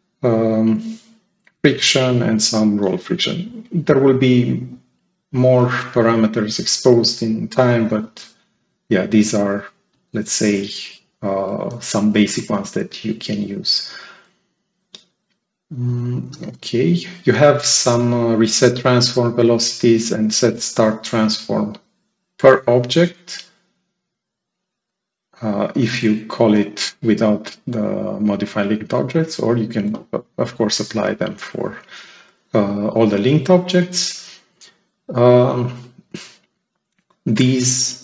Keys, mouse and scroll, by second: 23.9 click, 34.8 click, 35.6 click.